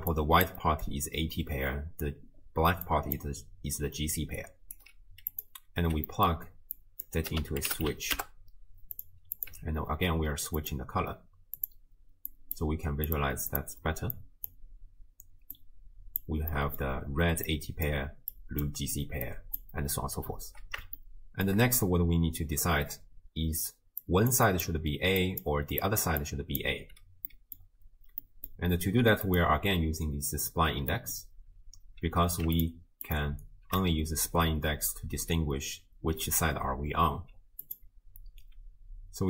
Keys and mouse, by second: 2.5-4.4 d, 2.9 click, 4.8 d, 4.9 d, 5.8 x, 6.1 click, 6.8-9.1 drag, 9.4 click, 10.6 click, 11.6 click, 13.5 click, 15.6-16.2 drag, 16.5 middle click, 17.5 click, 18.3 click, 19.2 click, 21.2 shift+middle click, 23.5-27.2 typing, 24.0 click, 24.5 click, 25.2 click, 25.8 click, 27.3 click, 28.3 click, 29.3 click, 30.9 click, 32.6 ctrl+shift+click, 33.1 ctrl+shift+click, 37.6 click.